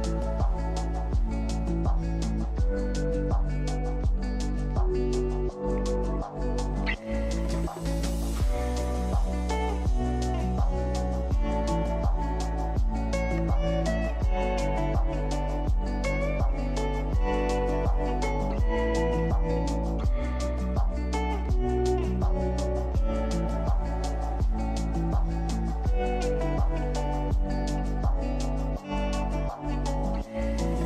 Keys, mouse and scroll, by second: 8.8 click, 11.8 click, 12.0 middle click, 12.8 alt+click, 12.9 scroll down 2, 13.2 Left, 13.3 scroll up 1, 13.3-13.9 scroll, 13.5 shift+middle click, 15.5-18.7 middle drag, 25.4-25.7 scroll down 5, 25.7 shift+middle click, 25.8 e, 26.3 scroll up 2, 26.4 shift+middle click, 26.6 ctrl+r, 27.5 middle click, 27.7 click, 28.5 middle click, 28.7 click, 29.4 middle click, 29.6 click, 29.9 click.